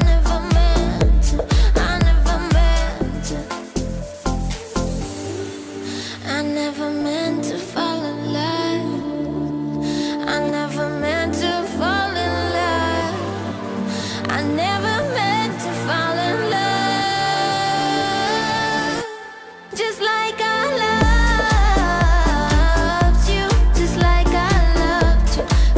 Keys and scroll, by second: 1.9 ctrl+=, 2.2 ctrl+-, 3.3 ctrl+-, 7.9 ctrl+=, 8.7 ctrl+-.